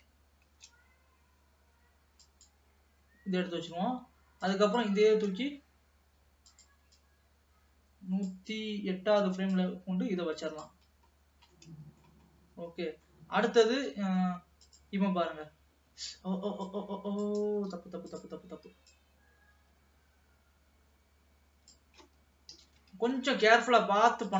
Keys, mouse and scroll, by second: 0.5 shift+d, 4.6 click, 5.3 shift+d, 7.2-11.3 drag, 11.3-11.6 scroll down 2, 11.6 middle click, 12.4-13.3 scroll up 2, 13.3 middle click, 13.6 scroll up 1, 13.9 ctrl+s, 14.9 click, 15.1 space, 16.1 space, 16.8-17.8 drag, 17.8 Delete, 19.1-22.1 drag, 22.6 KP_3, 23.1 ctrl+s, 23.4-23.8 scroll up 3, 23.8 middle click.